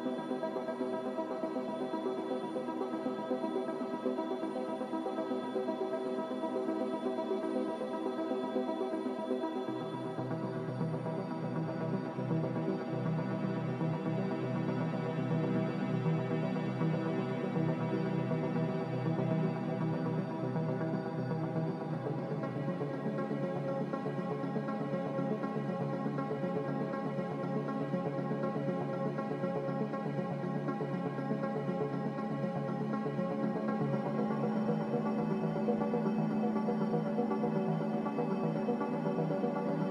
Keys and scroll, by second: 16.2 a, 18.2 ctrl+k, 24.6 ctrl+z, 32.6 x, 33.7 1, 35.9 Return, 35.9 5.